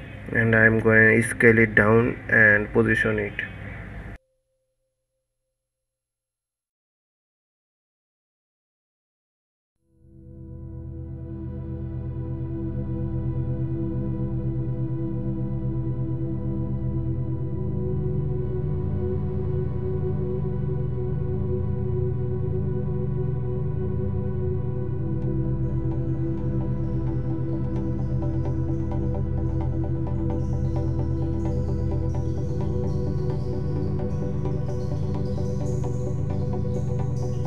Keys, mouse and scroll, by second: 5.8-13.3 drag, 13.3 s, 16.2 s, 21.6 drag, 22.3 s, 27.0-28.7 middle drag, 28.7 KP_1, 30.9 s, 35.8 click, 36.3 shift+click, 37.0 g.